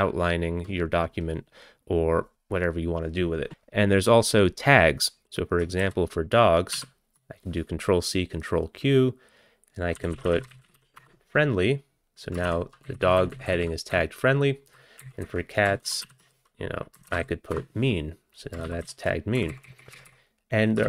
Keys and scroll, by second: 5.9 ctrl+c, 6.7 ctrl+q, 9.8-11.3 typing, 12.5 ctrl+e, 12.9 Left, 13.1 Left, 13.2 Left, 13.3 Left, 13.9 Down, 14.4 Down, 14.5 Down, 15.0 Up, 15.3 Up, 15.9 ctrl+c, 16.1 ctrl+q, 16.7-19.2 typing, 19.7 ctrl+x.